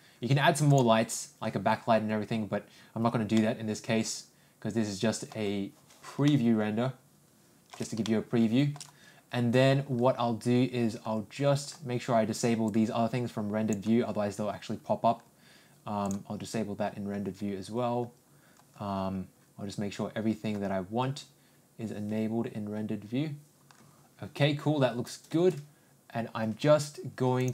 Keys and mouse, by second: 0.7 click, 3.3-5.3 middle drag, 6.2-7.7 ctrl+middle drag, 8.0 shift+middle click, 12.7-13.7 drag, 16.1 click.